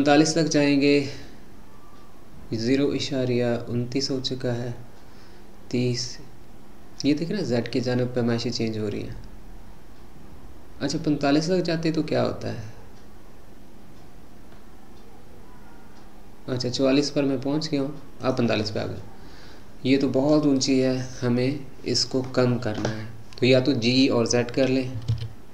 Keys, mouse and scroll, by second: 18.7-21.8 middle drag, 25.0 g.